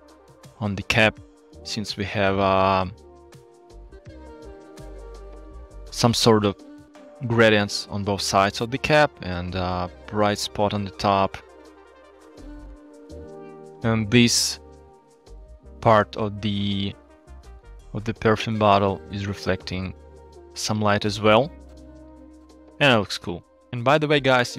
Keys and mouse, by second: 2.3-2.9 shift+drag, 4.0-4.3 shift+drag, 12.0-12.6 shift+drag, 15.2 alt+shift+z, 15.7 click, 16.2-18.9 drag, 22.5 ctrl+z.